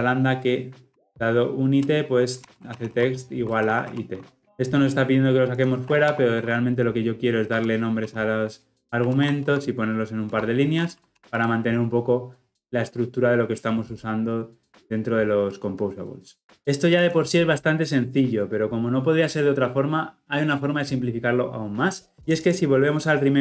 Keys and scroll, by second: 4.1 Escape, 4.4 ctrl+alt+o, 6.0 alt+Return, 11.1 ctrl+alt+l, 11.2 ctrl+alt+o.